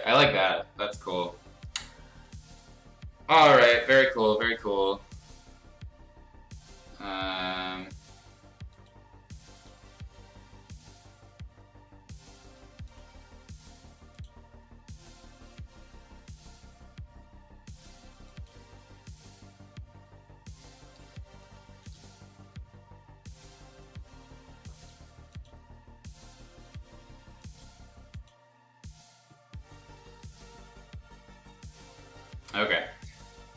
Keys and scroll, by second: 21.3 space.